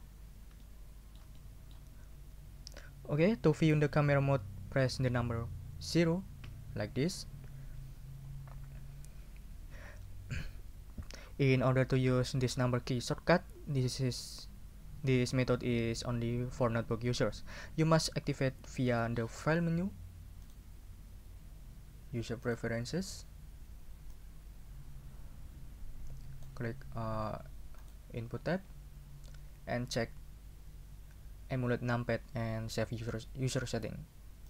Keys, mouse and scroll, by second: 0.6-1.9 shift+middle drag, 6.4 0, 20.4 click, 22.4 click, 22.6 middle click, 24.1-26.6 drag, 27.8 click.